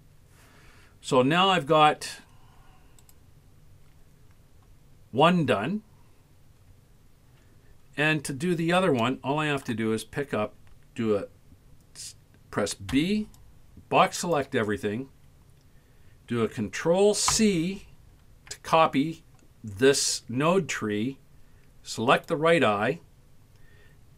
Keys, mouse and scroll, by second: 1.2-1.8 ctrl+scroll up 2, 3.0 right click, 3.7-5.5 scroll up 5, 6.3-6.8 scroll down 7, 7.0 scroll up 1, 7.9-8.8 scroll down 5, 9.1 shift+middle click, 9.7-10.3 shift+scroll up 1, 12.9 b, 17.4 ctrl+c, 22.1 click.